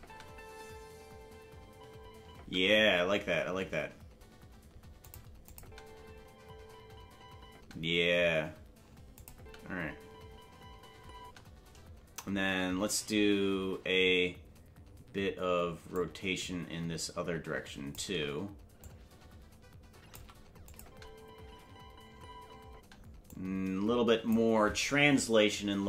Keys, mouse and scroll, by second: 3.6 space, 3.6 g, 5.4 click, 5.6 space, 9.1 click, 9.1 space, 9.3 space, 12.3 space, 15.9-17.9 drag, 18.8-20.1 drag, 20.6 click, 20.8 space, 23.3 click, 23.3 space, 25.3 Left.